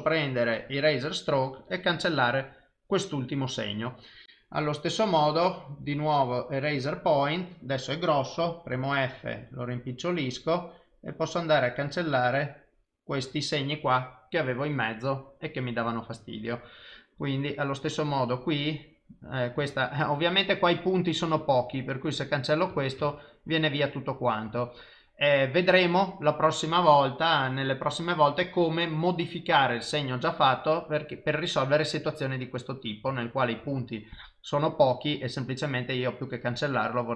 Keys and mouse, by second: 1.6 click, 4.6 click, 6.0 click, 8.7 f, 11.2 click, 11.8 click, 17.9 click, 18.7 click, 19.7 ctrl+z, 22.0 click, 23.0 ctrl+z, 31.5 click, 33.6 ctrl+z.